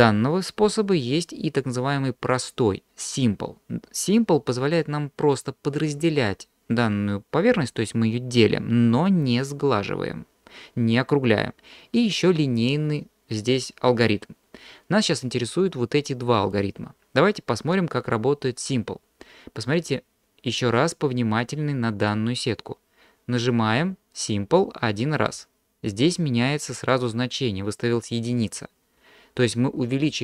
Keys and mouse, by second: 25.2 click.